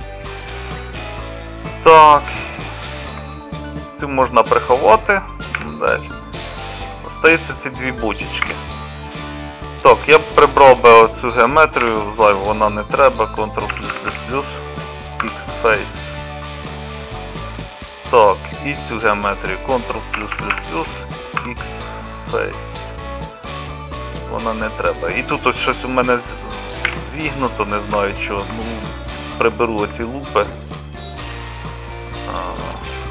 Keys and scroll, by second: 3.2 Tab, 4.1 Tab, 5.6 h, 8.5 Tab, 11.9 3, 13.8 ctrl+KP_Add, 14.0 ctrl+KP_Add, 14.1 ctrl+KP_Add, 14.6 3, 15.3 x, 20.2 ctrl+KP_Add, 20.4 ctrl+KP_Add, 20.6 ctrl+KP_Add, 21.4 x, 26.9 2.